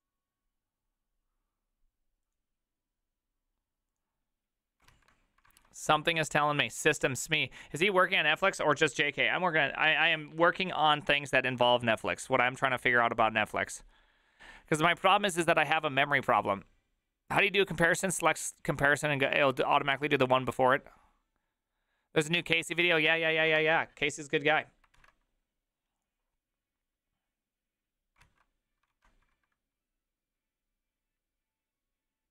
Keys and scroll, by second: 5.6 alt+{, 5.6 alt++, 23.6 alt+{, 23.6 alt++, 25.0 alt+[, 29.4 alt+{, 29.4 ctrl+a, 29.4 3.